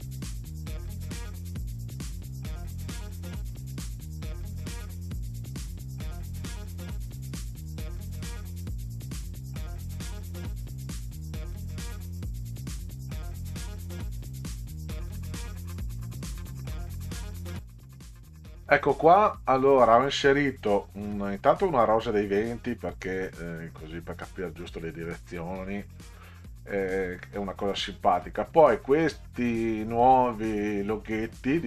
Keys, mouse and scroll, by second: 0.1 click, 0.4 click, 0.9 click, 1.2 click, 1.6 3, 1.9 click, 2.2 middle click, 2.3 middle click, 2.8 click, 4.3 middle click, 4.5 click, 4.9 middle click, 5.4 ctrl+c, 5.9-6.6 drag, 6.7 middle click, 7.1 middle click, 7.7 click, 7.9 click, 8.4 middle click, 8.9 shift+click, 11.9-12.4 ctrl+scroll up 2, 12.5 click, 14.4 click, 14.6 Delete, 14.9 middle click, 15.4 middle click, 16.0 middle click, 17.2 click, 31.2 alt+scroll up 2.